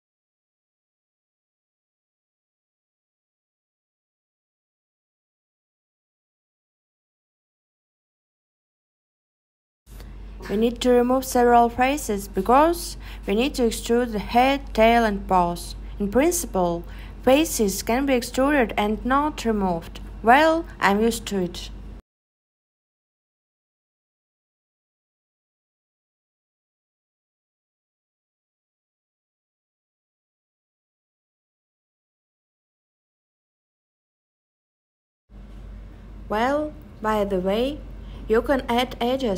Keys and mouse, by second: 0.3 x, 4.4 click, 4.4 right click, 5.6 x, 7.7 super+z, 10.2 click, 12.3 click, 17.7 click, 21.7 click, 22.5 click, 22.5 right click, 23.2 x.